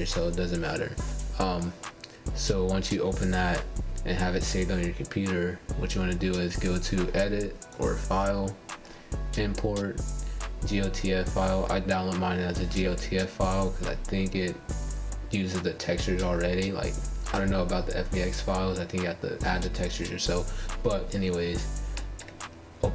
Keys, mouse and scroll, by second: 6.6-9.8 drag, 21.9 g.